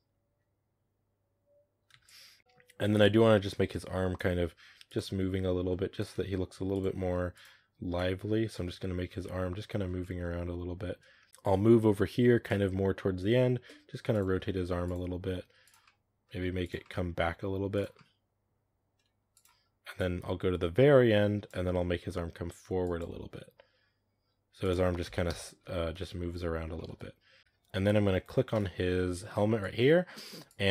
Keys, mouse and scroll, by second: 1.2-1.8 drag, 1.8 space, 1.9-2.4 drag, 2.4 right click, 2.7-4.4 drag, 4.4 r, 4.9 r, 6.1 r, 6.7 r, 7.8-8.4 drag, 8.4 space, 8.9 scroll down 4, 9.1 middle click, 9.7 scroll down 3, 9.9-11.3 middle drag, 11.3-13.3 drag, 13.3 r, 14.1 r, 15.2 r, 15.7-16.3 middle drag, 16.3 r, 16.7 middle click, 17.1 r, 17.8-19.0 middle drag, 19.0 r, 19.8-21.6 drag, 21.6-22.2 scroll up 3, 22.7 r, 23.2 r, 25.1 KP_0, 25.8 space, 26.6-27.4 shift+middle drag, 27.4 space, 28.4 right click, 29.5-30.7 drag.